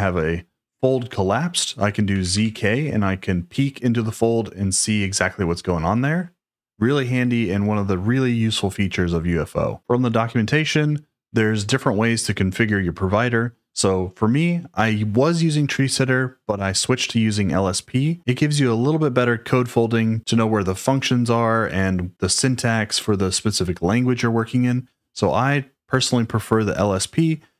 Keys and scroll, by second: 0.0-0.2 typing, 1.9-2.9 typing.